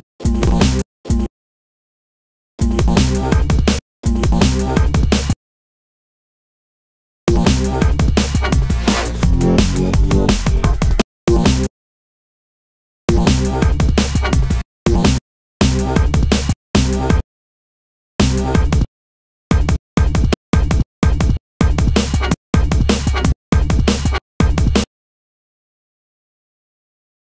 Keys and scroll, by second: 2.9 space, 3.3 space, 4.8 space, 9.9 super+e, 13.6 space, 25.6 super+c, 26.9 super+v.